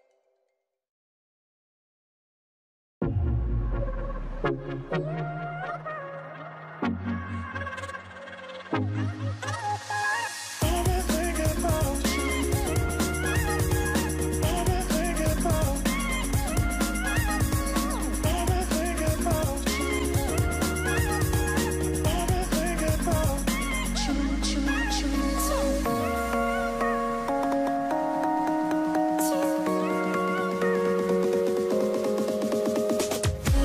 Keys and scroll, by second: 0.5 typing, 1.0 Return, 3.0 ctrl+z, 3.0 typing, 14.0 typing, 14.2 Return, 16.4 v, 23.4 Up.